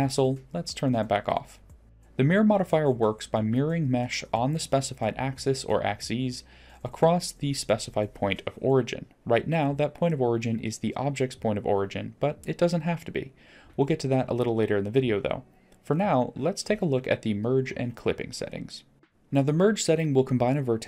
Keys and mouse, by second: 0.7 middle click, 2.4 click, 13.7 middle drag.